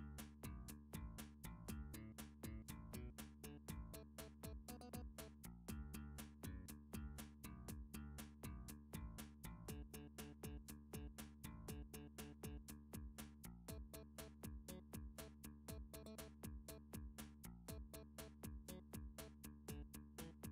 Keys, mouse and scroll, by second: 1.8 click, 2.9 middle click, 4.1 1, 6.4 shift+d, 8.1 x, 9.0 click, 9.5 7, 10.6 r, 11.4 click, 12.0 g, 14.0 click, 14.6 3, 15.0-15.8 scroll, 16.1 middle click, 17.0 middle click, 17.3 middle click, 20.1 shift+middle click, 20.3 Tab.